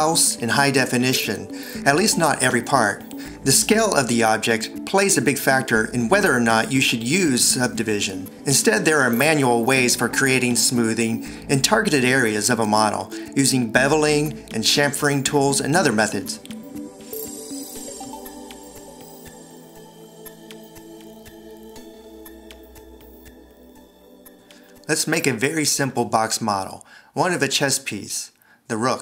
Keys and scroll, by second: 9.5 alt+e, 12.2 alt+shift+super+c, 13.2 Escape, 24.5 Escape.